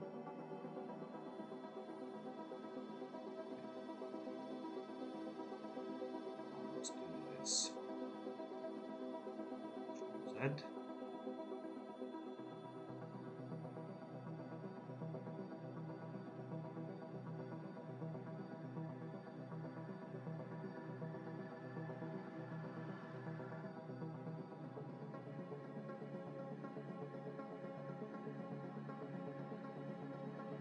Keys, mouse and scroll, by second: 0.0 ctrl++, 0.9 ctrl+-, 1.6 ctrl++, 4.3 ctrl+-, 9.7 ctrl+z, 15.4 ctrl+z, 22.4 ctrl+z.